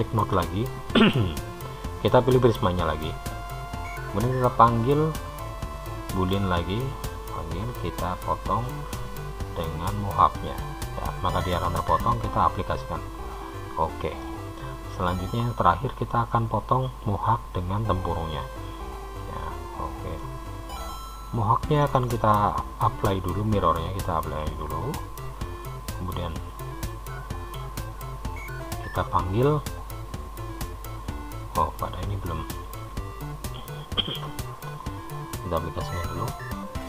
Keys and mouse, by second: 0.4 Tab, 2.3 click, 5.5-8.8 drag, 12.8 click, 14.4-15.6 middle drag, 16.3 click, 20.4-22.4 middle drag, 24.7 click.